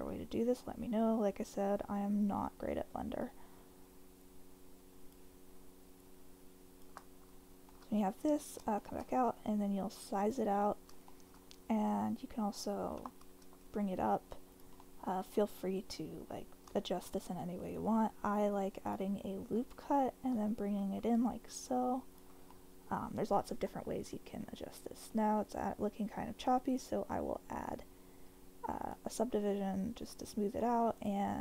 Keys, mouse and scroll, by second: 0.6 shift+click, 2.3 shift+click, 4.2 shift+click, 6.0 shift+click, 7.7-9.0 middle drag, 9.3 s, 10.2 click, 10.6 middle click, 13.0 g, 13.4 z, 14.5 click, 14.9-16.6 middle drag, 16.8 shift+middle click, 18.9 click, 19.5 click, 20.3 s, 22.1 click, 22.5 middle click, 23.7 middle click, 26.7-28.9 drag, 30.1 Tab, 30.6 middle click, 31.0 right click.